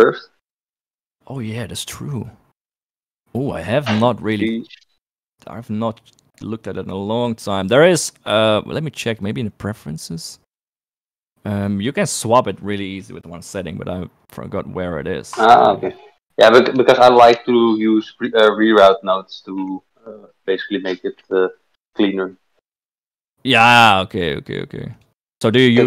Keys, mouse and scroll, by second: 4.8 shift+click, 6.1 click, 7.1 middle click, 8.6-11.1 drag.